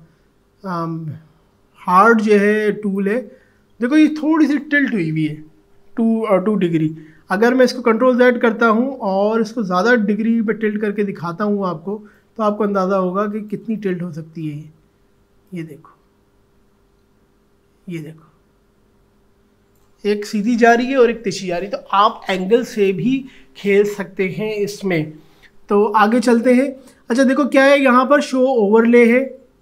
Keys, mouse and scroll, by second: 7.4 click, 7.6 ctrl+z, 8.3 ctrl+z, 9.9 ctrl+z, 12.1-22.1 drag.